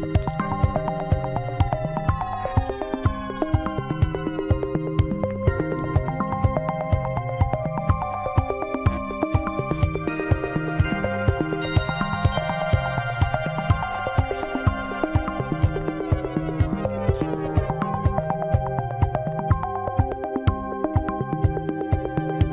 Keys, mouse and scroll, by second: 1.2-3.3 scroll up 5, 3.3 click, 4.8 click, 5.6-8.6 drag, 8.7-11.3 scroll down 1, 11.4 scroll down 3, 11.8-13.1 middle drag, 13.1 click, 15.3 g, 18.5 KP_1, 19.9 click, 20.4-21.9 scroll up 6, 21.9-22.4 shift+middle drag, 22.4-22.5 scroll down 4.